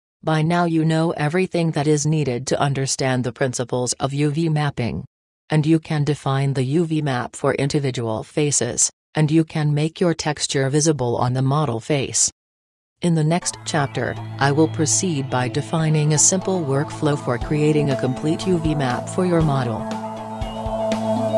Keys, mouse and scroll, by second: 1.6 click, 1.8-2.9 drag, 5.8-7.9 middle drag, 7.9 Tab, 9.7-11.4 middle drag.